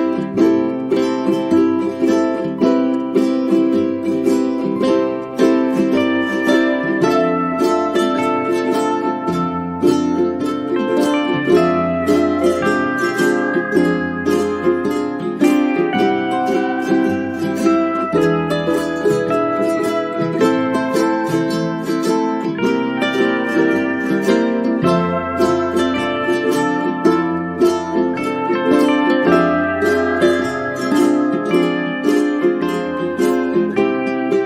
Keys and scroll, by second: 0.2 0, 1.4 5, 2.7 ;.